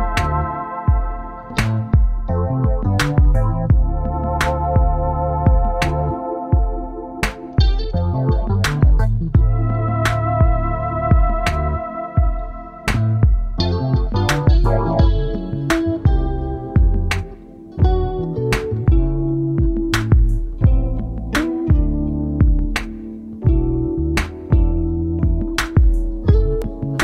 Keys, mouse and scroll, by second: 0.6-1.0 scroll down 1, 1.0 scroll, 1.7 ctrl+click, 3.3-3.8 scroll up 1, 3.8 scroll, 4.7 ctrl+click, 5.8 ctrl+click, 7.8-8.5 scroll down 1, 8.9 ctrl+click, 11.5 ctrl+click, 14.1 shift+Down, 14.6 shift+Down, 14.9 shift+Down, 17.4 shift+Down, 19.9 double click, 22.1-23.4 scroll down 1, 24.3 ctrl+t, 24.9 shift+click, 26.7 double click.